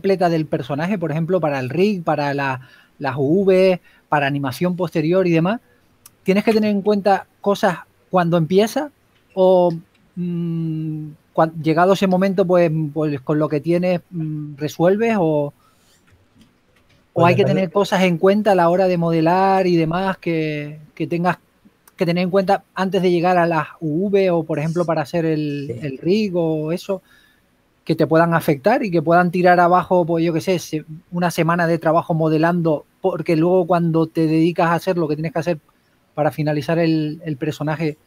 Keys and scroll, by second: 0.0 s, 1.4 w, 10.1 w, 13.7 w, 15.8-17.0 typing, 16.6 super+a, 18.5-19.5 typing, 21.6 shift+f, 25.1-27.3 typing, 28.4 typing, 31.3-31.7 typing, 35.4-36.3 typing, 37.5-38.0 typing.